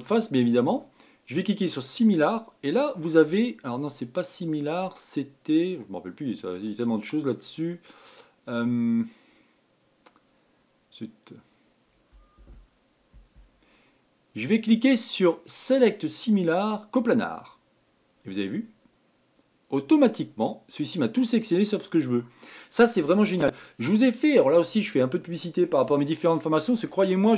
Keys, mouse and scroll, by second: 18.8-21.9 middle drag, 23.8-24.2 scroll down 3, 24.2-24.8 scroll up 3, 24.8-26.6 scroll down 1, 26.6-27.3 shift+middle drag.